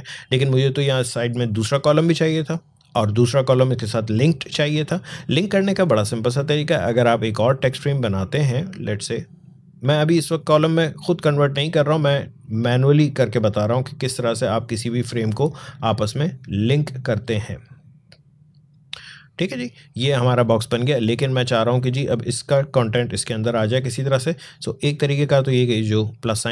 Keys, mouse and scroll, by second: 1.9 click, 5.2-18.7 drag, 20.8 click.